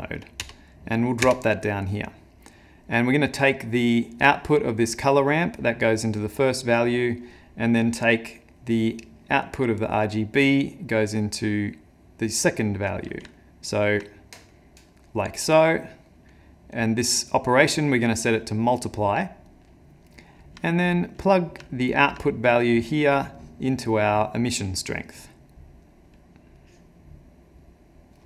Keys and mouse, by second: 4.2 click, 8.6 click, 13.4 ctrl+middle click, 14.5 middle click, 15.7 middle click, 15.9 ctrl+middle click, 16.8 click, 19.5 click, 20.2 middle click, 20.6 ctrl+middle click, 22.3 middle click, 22.6 middle click, 23.4 click, 24.5 click, 26.6 click.